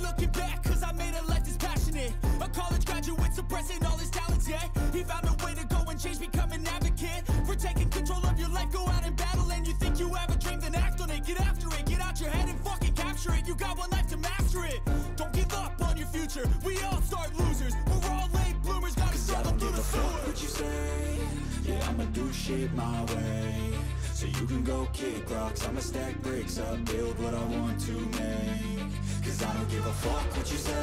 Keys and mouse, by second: 0.2 right click, 0.9 right click, 2.9 right click, 4.3 right click, 8.6 right click, 8.7 right click, 28.9 right click.